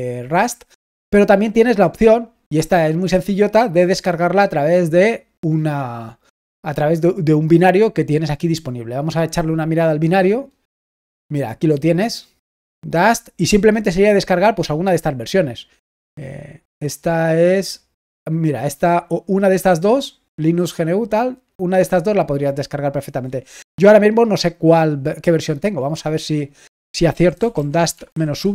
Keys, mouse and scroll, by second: 2.2-3.2 scroll down 1, 7.6 click, 10.3-11.1 scroll down 1, 11.1-12.0 scroll down 1, 22.8 click.